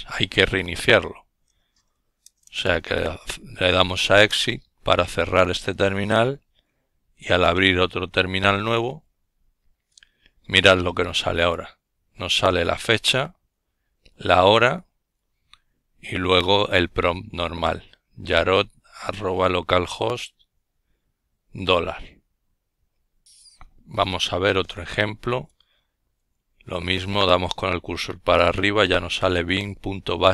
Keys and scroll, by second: 0.0-1.6 typing, 1.8 Return, 5.0 ctrl+alt+t, 23.9 Up, 27.4 Return, 29.3 Down, 29.8 Down, 29.9 Down, 30.0 Down, 30.1-30.3 typing.